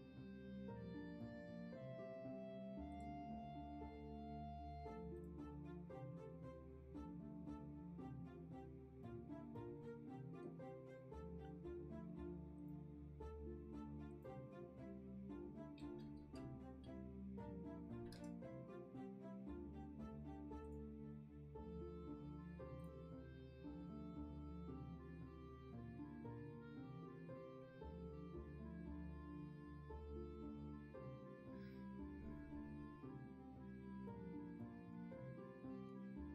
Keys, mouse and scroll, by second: 29.0 ctrl+z.